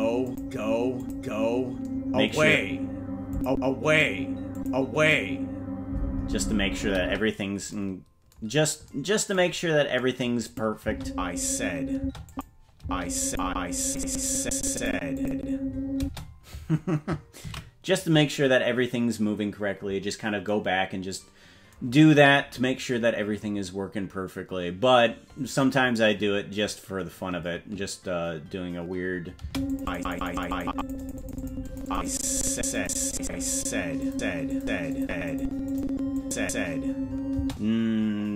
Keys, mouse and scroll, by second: 0.2 click, 1.0 click, 3.3 click, 4.5 click, 7.0 space, 9.5-9.9 scroll down 4, 10.5 click, 10.8 space, 12.0 space, 12.2 click, 12.7 space, 13.3 click, 13.8 click, 14.2 click, 14.5 click, 14.7 click, 15.1 click, 15.9 space, 19.9 ctrl+s, 29.4 space, 29.7 click, 30.8 click, 31.7 click, 31.9 click, 32.3 click, 32.8 click, 33.3 click, 33.5 click, 34.1 click, 34.5 click, 34.9 click, 35.3 click, 35.7 click, 36.2 click, 37.4 space.